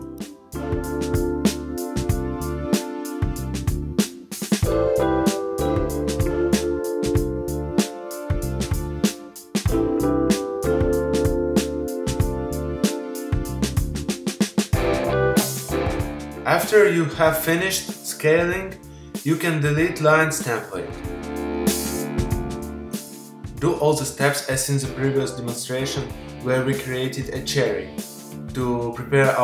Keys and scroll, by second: 6.1 v, 8.4 super+=, 14.4 super+0, 21.4 BackSpace.